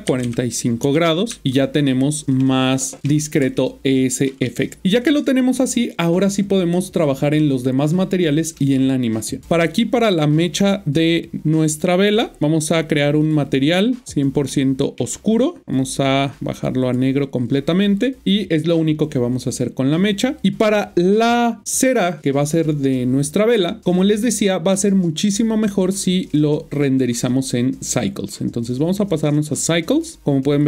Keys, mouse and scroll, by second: 0.0 typing, 0.8 Return, 1.3 Tab, 2.4 middle click, 3.4 middle click, 6.1 scroll up 1, 9.4 click, 14.4 middle click, 15.6 click, 20.3 click, 26.1 click.